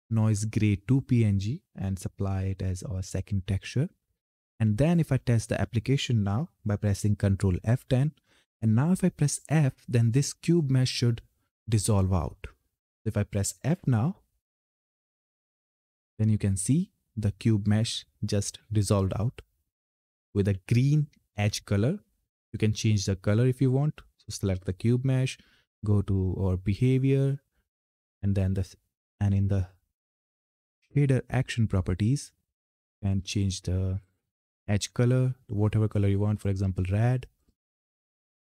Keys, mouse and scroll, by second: 2.8 click, 7.3 ctrl+F10, 14.4 f, 20.1-20.4 typing, 22.9-30.8 drag, 32.4 click, 36.1 click.